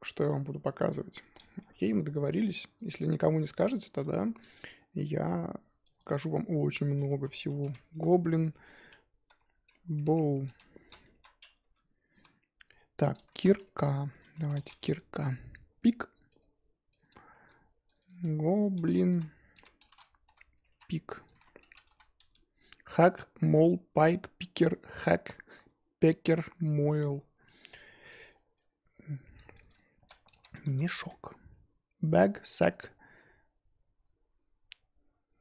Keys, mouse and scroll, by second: 0.1 click, 0.7-1.4 middle drag, 1.4 scroll down 3, 1.6 g, 3.6 click, 4.1-5.9 shift+middle drag, 5.9-11.6 drag, 16.4 click, 16.9 click, 17.9-25.6 drag, 26.9 click, 27.8 click, 28.5 click.